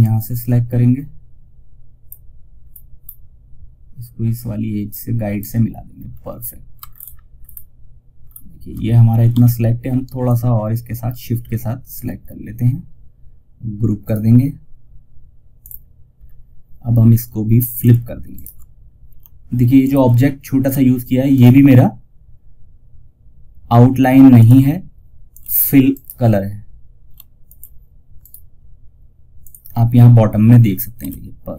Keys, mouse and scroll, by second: 2.0 scroll up 1, 3.6 click, 5.2 scroll down 1, 6.2 alt+scroll up 1, 9.5-13.3 shift+drag, 13.3 right click, 14.9 click, 15.5 scroll down 1, 17.1 click, 17.6 ctrl+right click, 19.1 shift+click, 20.6 right click, 23.7 click, 25.2 right click, 26.8 click, 28.7 click, 30.3 shift+F2, 31.5 click.